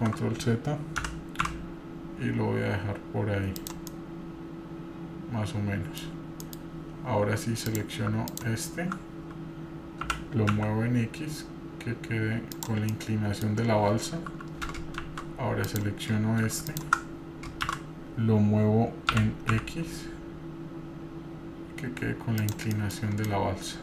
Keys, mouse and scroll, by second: 3.9-6.0 middle drag, 6.5 middle click, 7.6 click, 8.3 alt+click, 10.0 g, 12.9-13.4 middle drag, 14.4 middle click, 15.0 shift+z, 15.6 click, 16.7 alt+click, 17.6 shift+z, 19.2 g, 22.7 middle click, 23.0 scroll down 1, 23.3 middle click.